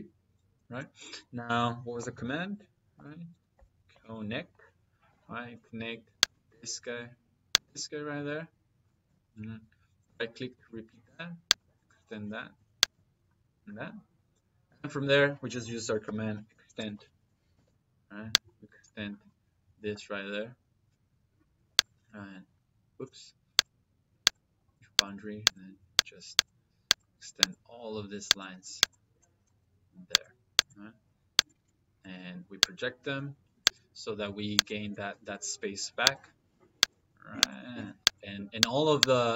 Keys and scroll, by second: 1.1 Escape, 1.9 c, 2.8 o, 3.4 n, 4.9 space, 9.9 space, 15.3 Escape, 15.9-17.4 typing.